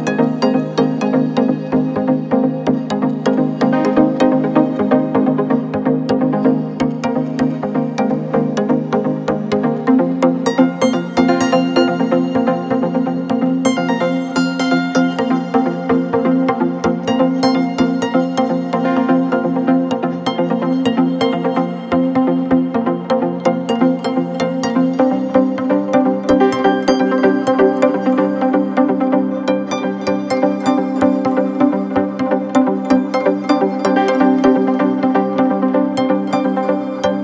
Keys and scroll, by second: 0.7 Left, 1.1 Left, 1.3 Left, 1.4 Left, 2.0 Left.